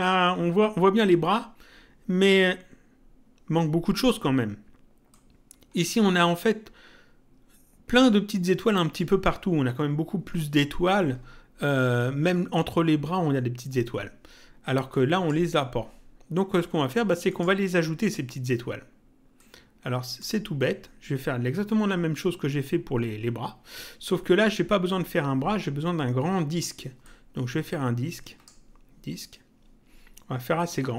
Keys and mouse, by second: 5.1 click, 14.9 click, 17.3 click, 19.3 click, 27.0 click.